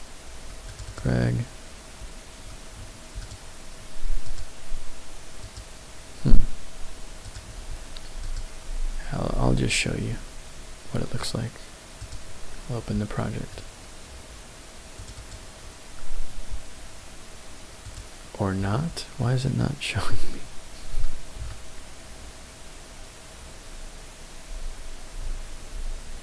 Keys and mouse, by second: 8.2-12.2 drag.